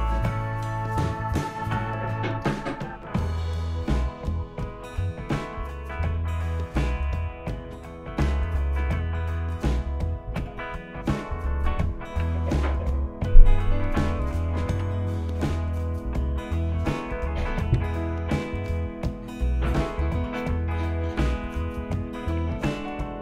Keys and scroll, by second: 10.3 Return, 12.2 Return, 14.8 Return, 20.3 Return.